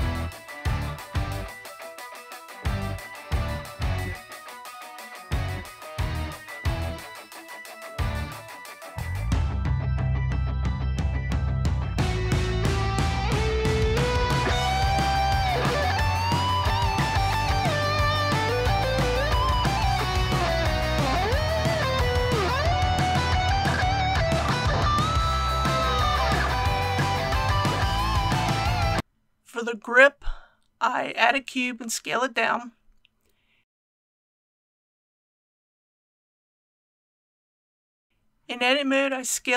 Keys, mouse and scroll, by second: 2.0 KP_1, 2.7 alt+a, 2.9 alt+c, 3.1 click, 3.3 right click, 3.5 middle click, 4.0 c, 4.2 click, 4.3 right click, 4.6 KP_1, 5.3 click, 6.0 i, 6.9 click, 7.1 i, 7.8 click, 7.9 i, 8.5 click, 13.2 3, 13.9 alt+click, 14.4 alt+h, 14.5 middle click, 14.7 ctrl+r, 15.3 scroll up 1, 15.5 click, 15.9 typing, 17.4 click, 17.8 alt+a, 18.3 3, 18.6 alt+click, 19.1 alt+x, 19.4 click, 19.9 alt+click, 20.6-20.9 typing, 21.2 click, 22.1 alt+h, 22.6 alt+a, 23.4-23.8 scroll down 1, 24.5-29.0 middle drag, 29.2 shift+a, 30.9 click, 31.9 click, 32.6 typing, 33.9-35.0 typing, 37.0-38.1 typing, 38.5 click, 38.5 Tab, 39.3 KP_1.